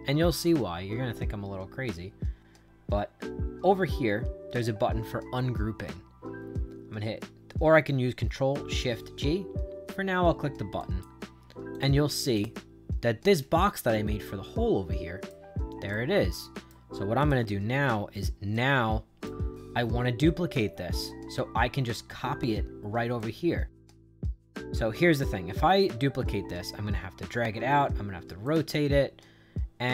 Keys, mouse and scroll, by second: 10.7 click, 11.6 click, 12.3 click, 14.1-15.2 right drag, 15.8 right click, 17.1 click, 18.4 right click, 23.1-25.1 right drag, 28.4-29.9 right drag.